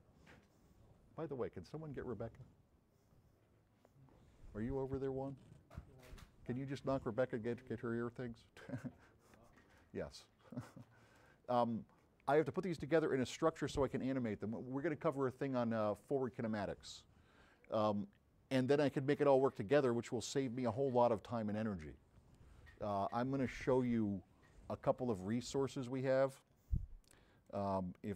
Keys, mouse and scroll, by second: 10.2-10.7 drag, 11.2 click, 27.5 click.